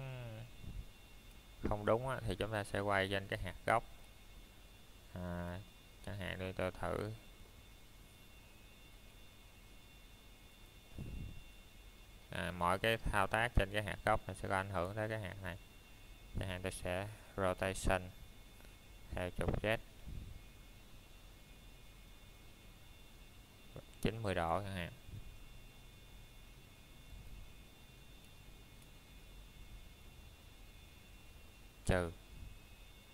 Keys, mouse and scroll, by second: 2.0 click, 2.5 middle click, 2.8 scroll up 1, 3.5 middle click, 3.9 scroll down 1, 4.8 shift+middle click, 5.1 scroll down 1, 5.8 middle click, 6.3-7.0 scroll up 1, 7.0 click, 7.6 middle click, 8.4 shift+middle click, 11.4 scroll up 1, 15.3 middle click, 16.0 shift+middle click, 16.3 scroll up 1, 17.5 middle click, 19.2 scroll down 1, 19.9 shift+middle click, 20.1-20.4 scroll down 1, 21.7 shift+middle click, 25.4 Tab, 27.1 click, 29.0 middle click, 29.6-31.1 scroll up 1, 31.5 shift+middle click.